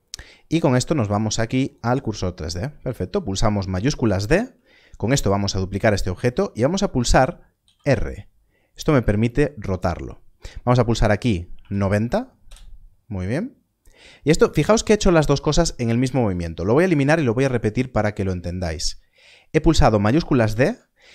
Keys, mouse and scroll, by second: 1.6 click, 4.2 shift+d, 11.5 r, 11.6 9, 13.7 scroll down 1, 16.2 x, 17.7 scroll up 1, 20.4 shift+d.